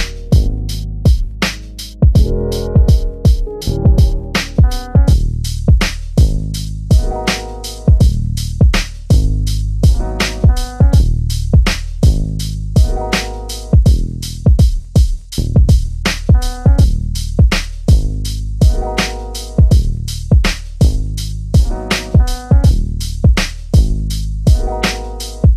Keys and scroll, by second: 13.2 3, 19.5 3.